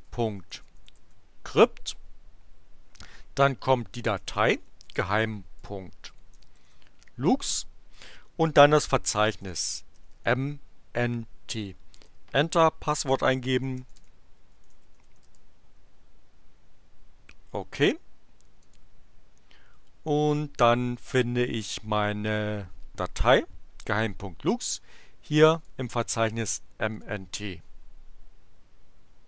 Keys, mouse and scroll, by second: 0.0-1.5 typing, 3.0-7.2 typing, 9.0-10.6 typing, 11.9 Return, 13.1-15.5 typing, 18.6 click, 25.3 click, 26.9 click.